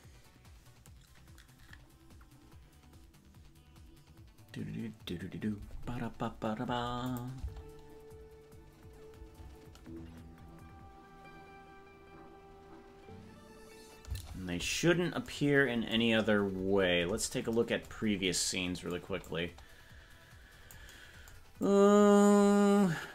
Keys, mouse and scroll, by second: 7.1 click, 7.5 space, 14.3 space, 16.3-17.5 scroll down 19, 19.3-20.8 drag, 21.6-23.1 drag.